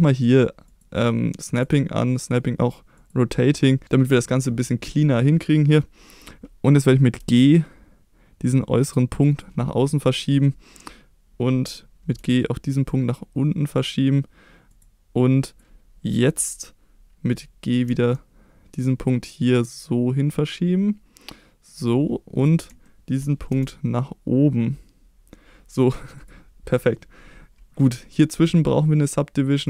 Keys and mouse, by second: 0.7 click, 1.5-3.4 drag, 7.2 g, 9.3 click, 12.1 g, 14.7 click, 15.5-17.8 drag, 17.8 g, 21.6 click, 22.4 click, 22.8 shift+middle click, 23.5 g, 26.1 click, 28.1 click.